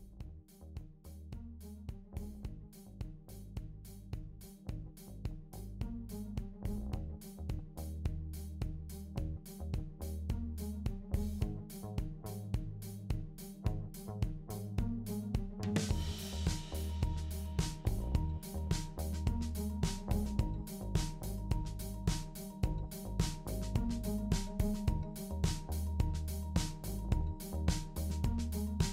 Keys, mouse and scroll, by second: 1.0 shift+click, 1.9 ctrl+l, 4.9 click, 5.8 shift+click, 6.4 ctrl+l, 8.7 click, 9.7 shift+click, 10.5 ctrl+l, 16.3 click, 18.1 shift+click, 18.9 ctrl+l, 22.6 click, 23.2 shift+click, 24.0 ctrl+l, 27.8 click, 28.5 click.